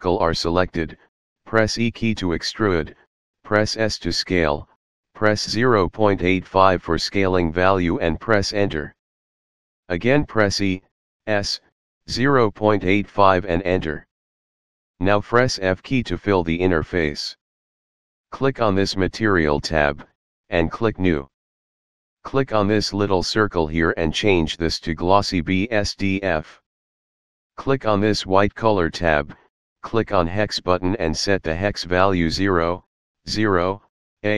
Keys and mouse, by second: 1.3 s, 4.4 KP_8, 4.9 KP_5, 7.0 Return, 10.1 e, 11.0 s, 11.7 KP_Decimal, 12.2 KP_8, 13.2 KP_5, 13.6 Return, 15.2 f, 19.9 click, 23.5 click, 25.7 click, 29.4 click, 30.9 click, 33.5 0, 33.9 a.